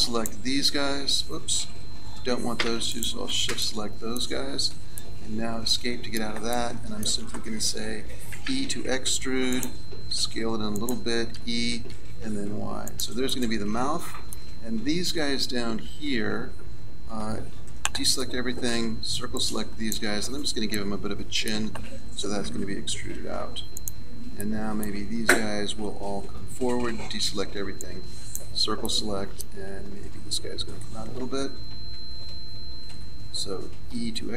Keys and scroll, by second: 8.3 e, 17.2 a, 18.7 c, 22.4 e, 26.2 a, 27.3 c, 33.9 e.